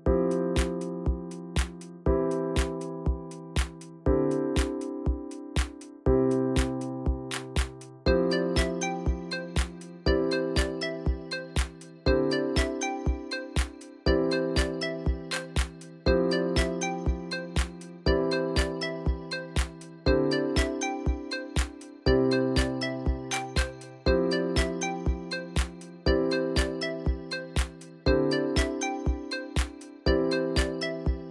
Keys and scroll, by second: 0.0 ctrl+Left, 0.3 ctrl+Left, 0.8-1.3 alt+Left, 1.3 alt+Right, 13.8-14.1 ctrl+alt+Down, 14.2 Right, 21.8 BackSpace, 25.0-27.3 typing.